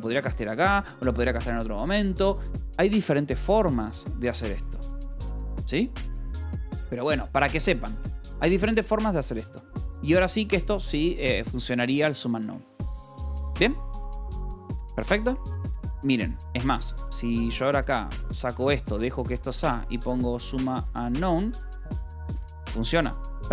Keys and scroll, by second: 0.1 Escape, 0.6 u, 3.2 j, 3.6 u, 4.4 j, 6.5-7.5 typing, 9.0-10.9 typing, 12.3 Escape, 15.4-19.2 typing, 18.3 Escape, 20.5 n, 21.0 Return, 21.2 Escape, 21.5 l, 22.3 k.